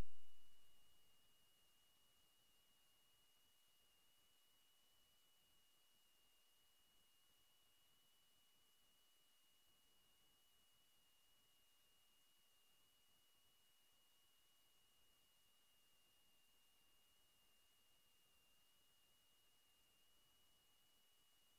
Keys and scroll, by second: 0.6 w, 2.5 scroll up 1, 3.7 d, 6.1 w, 7.3 a, 9.1 a, 9.7 space, 10.2 w, 13.7 w, 14.3 3, 16.7 3, 20.2 a.